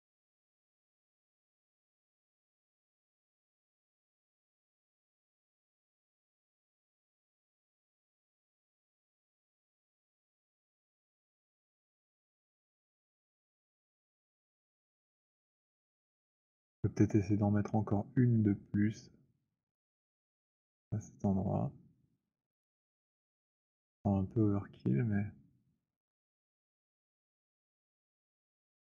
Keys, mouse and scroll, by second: 16.6 alt+click, 18.2-22.6 typing, 22.6 middle click, 26.0 alt+click, 27.0 alt+middle click, 27.3 middle click, 28.5 click.